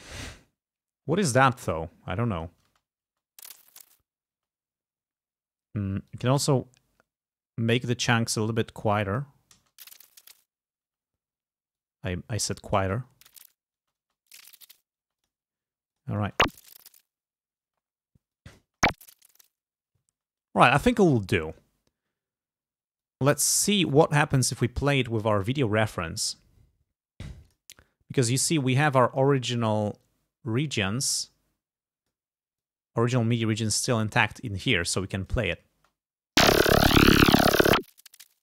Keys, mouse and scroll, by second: 1.8 click, 2.7 space, 4.4 space, 6.1 click, 8.4-9.5 drag, 9.6 space, 10.9 space, 11.8 click, 12.8 space, 13.8 space, 15.1 space, 15.3 click, 16.0 click, 16.3 space, 17.7 space, 18.4 click, 18.7 space, 20.2 space, 21.1 ctrl+scroll down 2, 21.7 ctrl+scroll down 2, 23.1 click, 24.1 ctrl+scroll up 2, 27.6 click, 28.9 click, 30.1-31.2 drag, 31.5 click, 32.7 click, 33.8 scroll up 2, 35.0 click, 35.8 space.